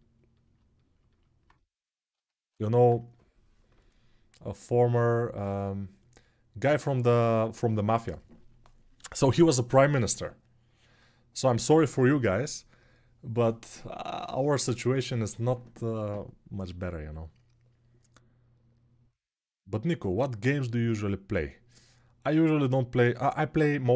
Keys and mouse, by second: 2.6-23.9 drag.